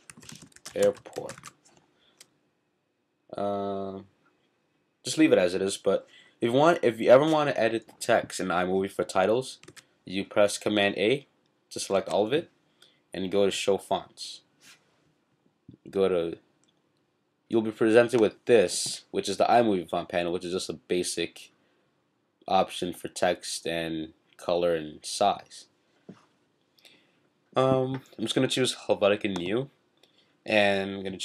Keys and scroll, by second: 0.0-1.7 typing, 9.7 super+a, 11.9 super+a.